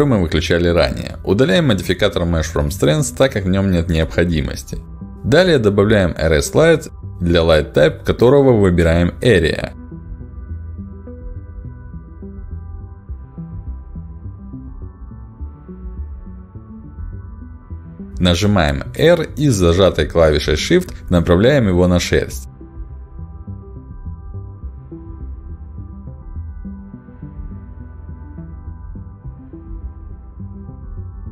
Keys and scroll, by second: 0.3 Delete, 6.7 Delete, 15.3 ctrl+alt+d, 21.9 r.